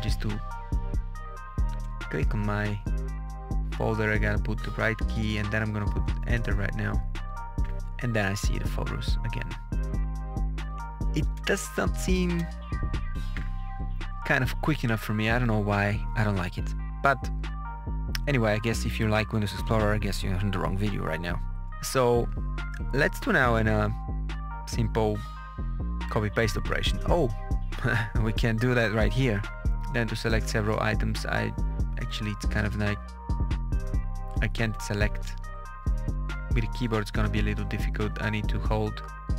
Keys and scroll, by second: 2.3 Down, 3.1 Right, 3.6 Down, 6.1 Return, 10.8 Up, 11.3 Return, 12.0 Down, 12.3 Return, 35.4 Down, 36.3 Up, 38.2 ctrl+Down.